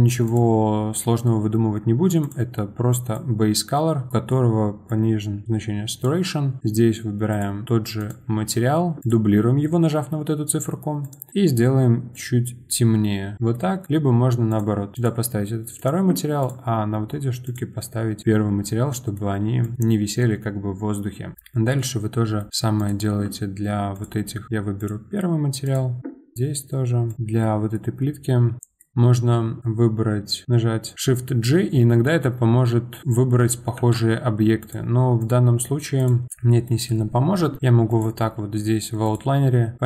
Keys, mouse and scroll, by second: 0.2-2.3 drag, 6.6 click, 7.3-11.1 drag, 13.3-14.5 middle drag, 14.5 click, 14.9-16.5 drag, 17.4 click, 18.9 middle click, 19.6 click, 20.4-20.7 scroll down 1, 21.3 click, 21.8-22.8 middle drag, 22.8 shift+click, 23.9-25.8 drag, 26.3 click, 27.2 scroll down 1, 27.4-28.9 middle drag, 28.6 ctrl+g, 28.9 ctrl+z, 30.9 shift+g, 33.8 ctrl+z, 34.6 click, 35.2 click, 36.0 click, 36.3-37.9 middle drag, 37.9 click, 39.0 click.